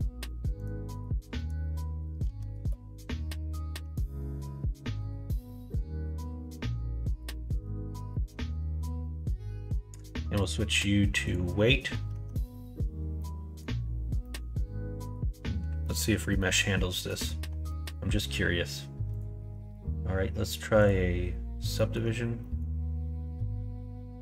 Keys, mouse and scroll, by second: 0.5-3.2 drag, 3.8 middle click, 5.0 middle click, 6.5 middle click, 7.3 middle click, 8.3 Tab, 9.0 middle click, 10.3-11.3 drag, 11.8 middle click, 12.1 Tab, 13.2 middle click, 14.2 middle click, 15.8 middle click, 16.4 middle click, 17.0 middle click, 17.7 middle click, 19.1-21.2 drag, 21.7 middle click, 22.4 middle click.